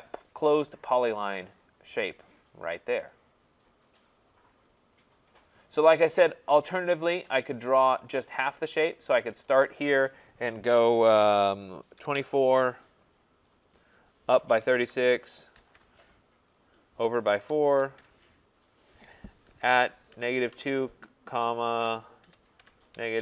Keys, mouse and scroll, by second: 5.1 scroll, 5.2-5.6 scroll down 2, 6.0-6.6 scroll down 4, 6.6 scroll up 2, 7.8 click, 9.0 click, 11.7-12.7 typing, 13.6 click, 14.4-16.1 typing, 16.6 click, 17.2-23.2 typing, 18.8 click.